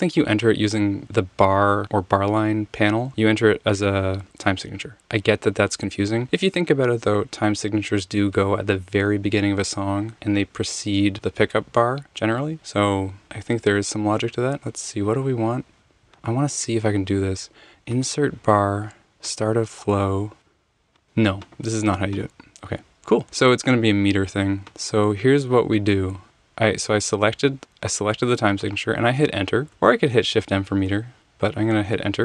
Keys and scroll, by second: 26.2 Return, 27.4 Escape, 29.7 Return, 29.9 Escape, 30.7 m, 31.2 Escape, 31.9 Return.